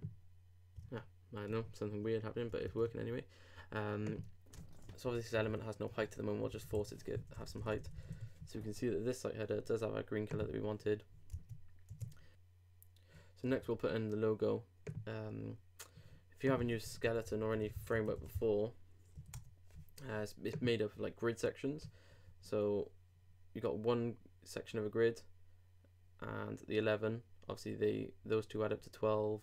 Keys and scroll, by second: 7.1 shift+x, 16.7 super+t, 17.0 super+s.